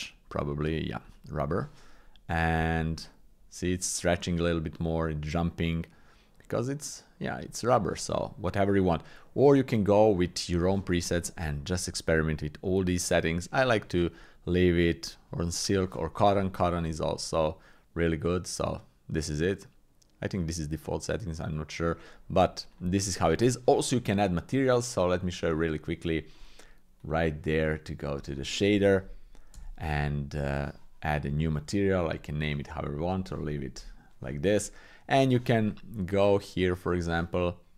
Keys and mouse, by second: 2.5-7.5 drag, 10.1 click, 13.5-16.0 drag, 16.9 click, 21.9 click, 25.4-26.4 drag, 27.1-28.2 drag, 29.5 n, 31.2 click, 33.3 shift+click.